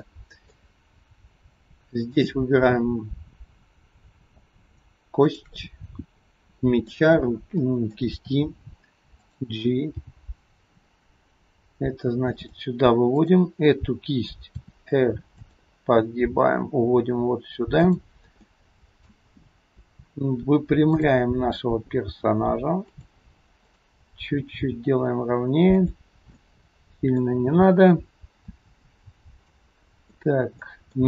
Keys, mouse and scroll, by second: 0.1 middle click, 2.1 click, 6.4 middle click, 7.8 middle click, 8.1 r, 10.0 g, 13.3 click, 14.5 r, 16.1 g, 18.4 middle click, 19.4-21.0 scroll down 2, 21.0 click, 21.5-22.1 scroll down 1, 22.1 g, 23.8 click, 24.6 g, 26.4 middle click, 27.7-29.4 scroll up 2, 29.5 middle click.